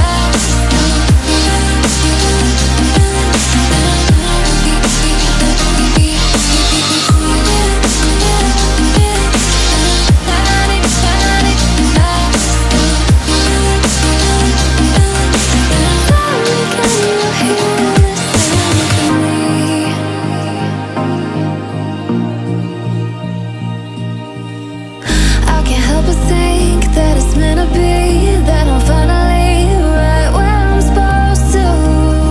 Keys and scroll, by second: 27.5 ctrl+z.